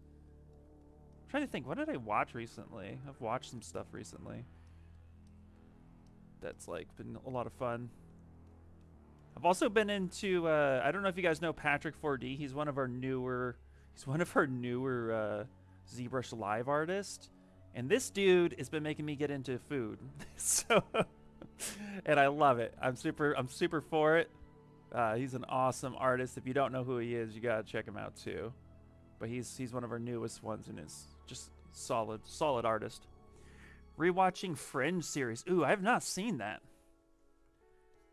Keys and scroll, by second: 10.7 ctrl+z, 10.9 ctrl+z, 11.0 ctrl+z, 11.2 ctrl+z, 11.3 ctrl+z, 11.5 ctrl+z, 12.3 ctrl+z, 20.9 s, 22.5 s, 28.2 s.